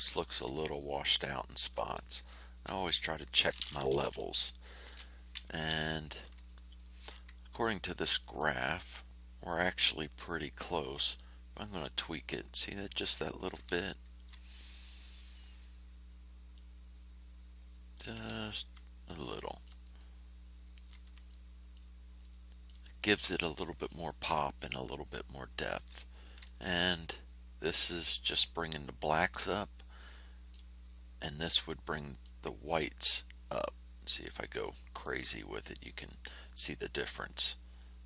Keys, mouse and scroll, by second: 0.3 ctrl+middle click, 0.7 ctrl+scroll up 2, 1.4 ctrl+scroll down 2, 2.4 ctrl+scroll down 2, 2.8 ctrl+middle click, 4.8 l, 7.8 click, 11.1-13.6 drag, 14.0 ctrl+scroll up 2, 14.5 ctrl+middle click, 16.5-18.6 middle drag, 18.9 ctrl+scroll down 2, 19.4 ctrl+middle click, 19.9-20.4 ctrl+scroll up 4, 21.2 ctrl+middle click, 22.2 middle click, 26.0 ctrl+scroll down 2, 30.1 click, 32.2-36.4 drag, 37.3-38.0 drag.